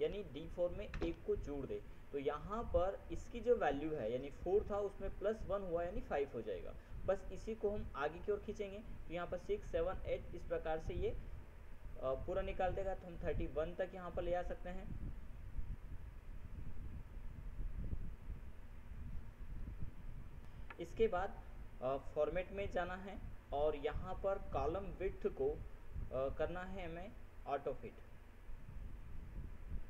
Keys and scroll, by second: 0.3 ctrl+1, 1.2 ctrl+Return, 20.7 ctrl+F7.